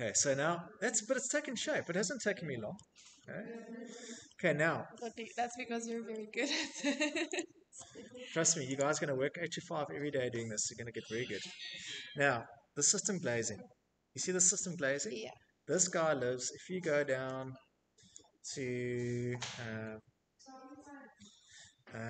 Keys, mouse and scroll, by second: 0.0 middle click, 0.4 middle click, 0.4 middle click, 0.8-1.3 scroll, 2.3-2.8 shift+middle click, 2.8 middle click, 2.8 middle click, 2.9 middle click, 3.4 shift+middle click, 4.6 click, 6.1 click, 6.1 scroll, 9.4 click, 13.1 click, 14.0-15.0 scroll, 20.8 click.